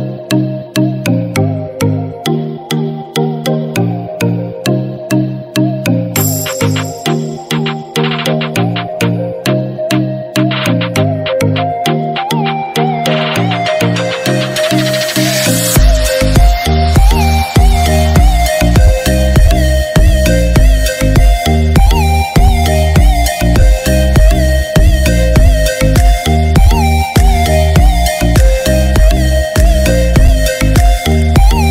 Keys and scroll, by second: 2.9 ctrl+d, 4.2 ctrl+=, 18.0 ctrl+j, 27.0 ctrl+d, 28.0 ctrl+-.